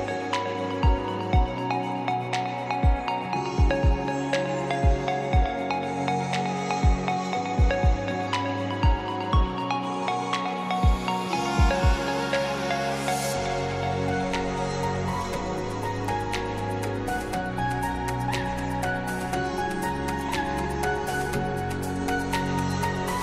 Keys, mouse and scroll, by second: 4.7 click, 8.8-9.4 drag, 21.4 alt+Num_Lock, 21.4 click.